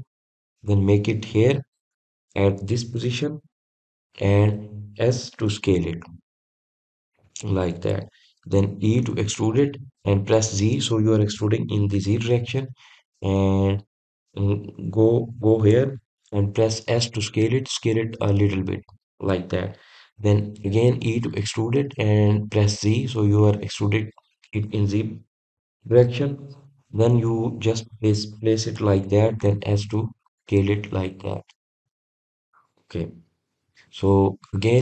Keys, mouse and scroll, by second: 10.2 e.